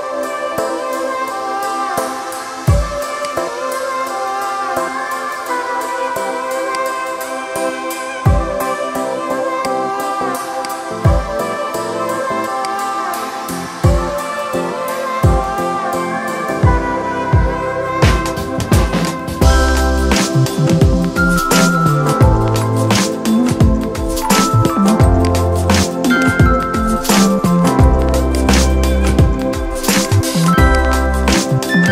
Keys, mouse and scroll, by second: 23.4 ctrl+z, 25.0-29.9 drag.